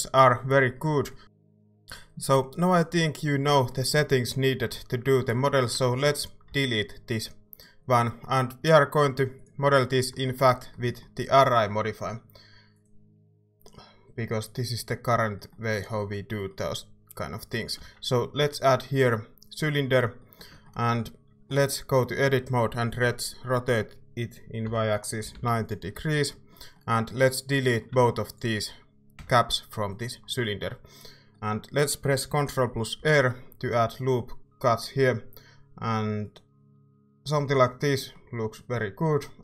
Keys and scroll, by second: 5.9 Tab, 17.8 a, 22.0 Tab, 23.0 r, 24.6-25.8 typing, 29.2 x, 33.0 ctrl+r.